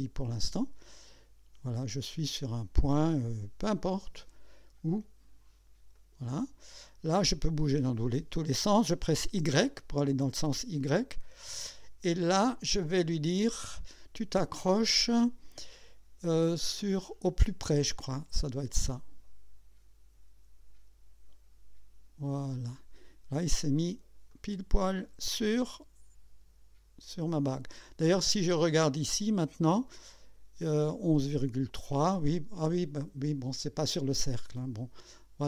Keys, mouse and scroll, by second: 5.9 click, 9.3 y, 18.5 click, 22.5 click, 23.4-23.8 scroll up 1, 24.3 right click, 29.0 click.